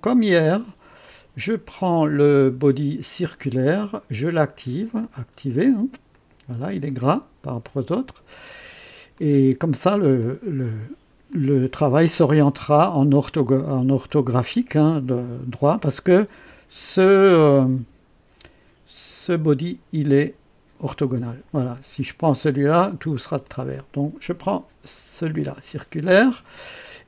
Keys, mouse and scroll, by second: 1.0 click, 4.4 right click, 5.0 click, 6.1 click, 6.9 click, 9.2-9.9 drag, 10.2-11.0 drag, 11.3-12.1 drag, 12.6 click, 14.1-14.8 drag, 16.3 KP_1, 17.7 KP_3, 25.3 click.